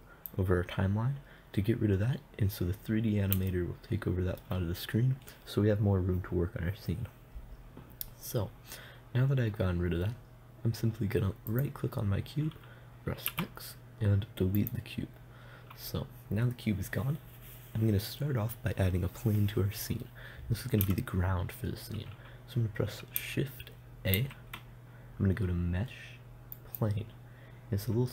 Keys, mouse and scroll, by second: 3.9-11.9 middle drag, 11.9-13.7 right drag, 13.7 x, 24.6 shift+a.